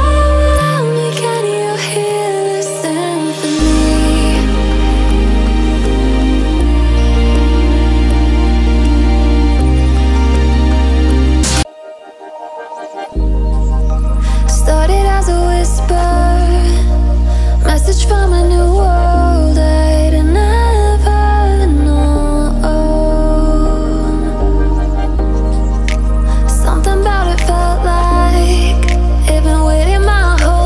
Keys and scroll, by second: 20.5 ctrl+BackSpace.